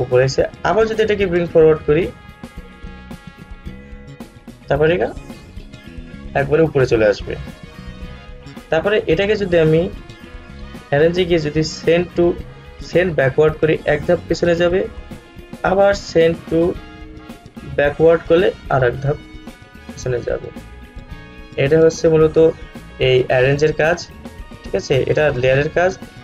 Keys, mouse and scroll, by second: 0.8 right click, 4.3 click, 9.3 right click, 11.1 click, 13.6 click, 15.3 right click, 16.7 click, 21.4-25.2 drag.